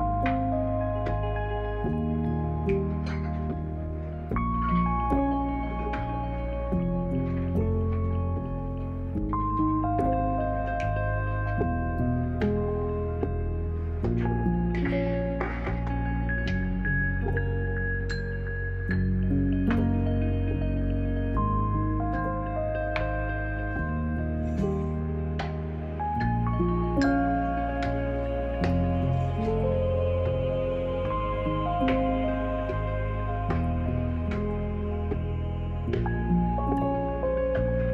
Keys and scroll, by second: 1.6 b, 17.6 e, 24.7 b.